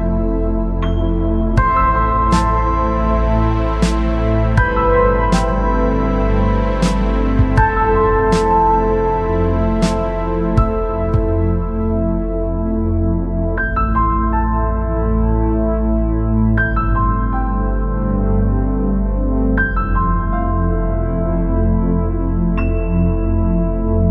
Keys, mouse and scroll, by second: 0.6 Tab, 1.9-3.8 drag, 5.2-7.1 middle drag, 10.6-11.8 drag, 12.1 Tab, 13.5 Tab, 14.0-15.7 middle drag, 17.6 ctrl+s, 19.6-21.2 drag, 21.2 middle click, 23.6-24.1 drag.